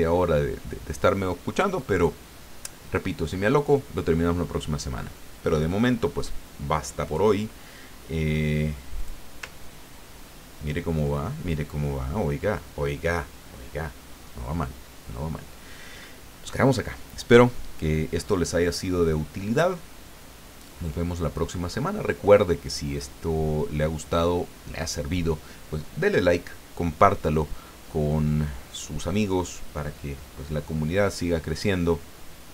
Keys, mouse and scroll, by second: 7.0 click, 9.0 click, 9.6-10.3 ctrl+scroll down 2, 10.5-11.1 ctrl+scroll down 2, 11.3 ctrl+click.